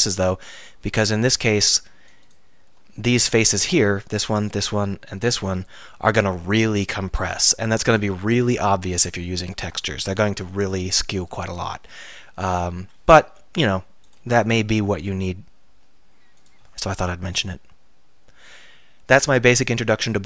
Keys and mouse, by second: 12.3 middle click, 12.8 KP_3, 14.8 r, 16.5-20.2 drag.